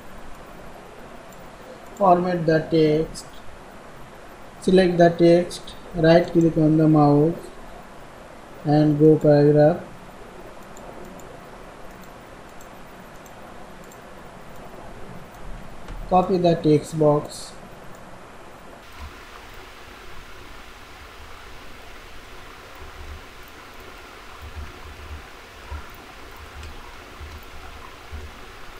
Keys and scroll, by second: 4.4 ctrl+a, 22.9 ctrl+c, 24.6 ctrl+v, 26.3 ctrl+a, 27.0 ctrl+c, 27.4 ctrl+a, 27.9 ctrl+v, 28.6 ctrl+v.